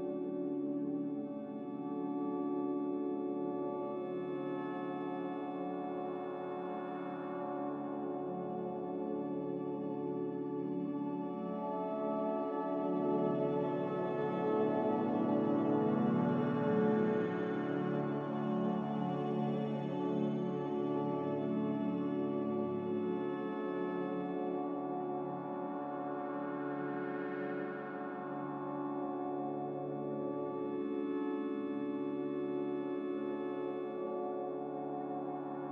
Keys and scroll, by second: 3.3 q, 18.8 Delete, 22.6 Delete, 23.3 Delete, 24.0 Delete.